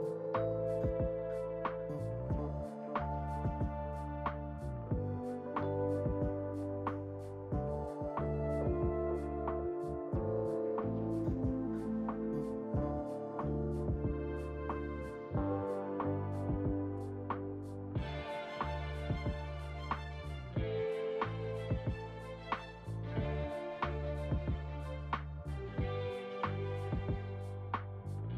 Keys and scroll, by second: 2.5 F4, 12.0-12.8 typing, 13.3 Return, 15.9-17.2 typing, 27.9 1.